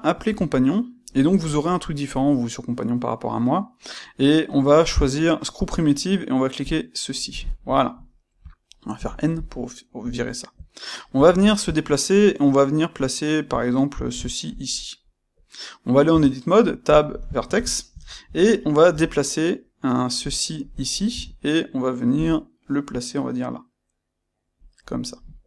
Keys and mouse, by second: 0.0 shift+c, 8.9 n, 11.0 g, 14.6 click, 16.0 Tab, 17.3-18.8 ctrl+middle drag, 18.8 g, 20.3 click, 21.0 Tab, 22.1 g, 24.7 click, 25.0-25.4 middle drag.